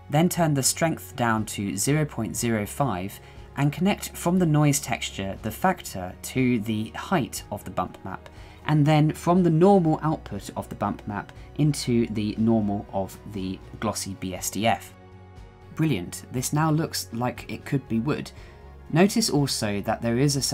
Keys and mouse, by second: 3.3-5.9 drag, 7.0-8.4 drag, 9.4 shift+middle click, 11.4-12.7 drag, 14.8-15.6 shift+middle drag, 16.7-17.6 middle drag, 18.1-20.5 shift+middle drag.